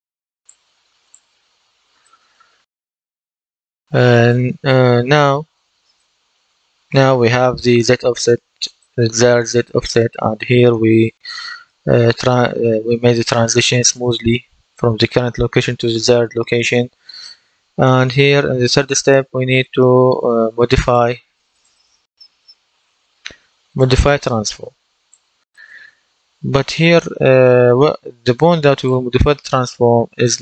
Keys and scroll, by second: 21.5-22.7 typing.